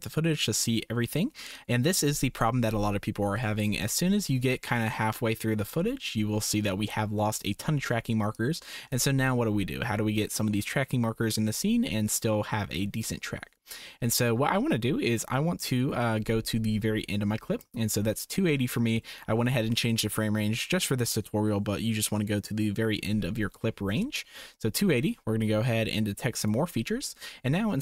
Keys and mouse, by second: 8.3-8.9 drag, 13.0-17.6 drag, 24.2 shift+click, 26.4 click.